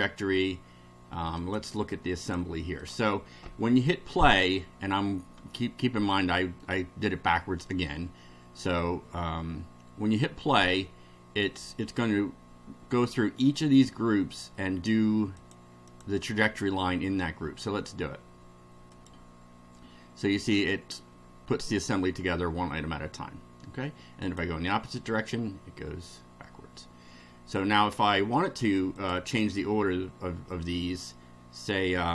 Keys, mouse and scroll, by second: 1.4 click, 2.2 click, 2.8 click, 5.5-6.7 middle drag, 8.7-10.3 middle drag, 15.4 click, 15.9 click, 19.0 click, 24.2 click, 29.0 click.